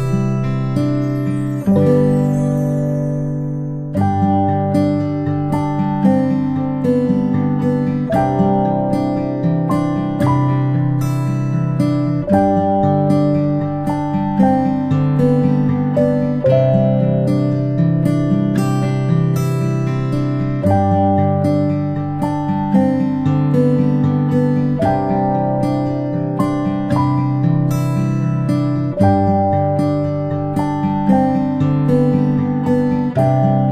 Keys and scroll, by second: 18.1 ctrl+a, 24.6 ctrl+z, 32.2 ctrl+space, 33.0 space, 33.2-33.7 space.